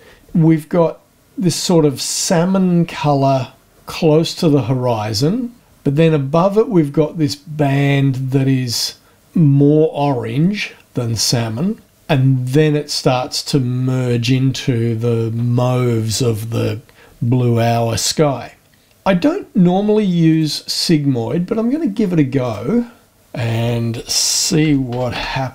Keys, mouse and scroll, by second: 20.3 click, 22.4 click, 24.5 s, 24.6 i, 24.9 g, 25.1 m.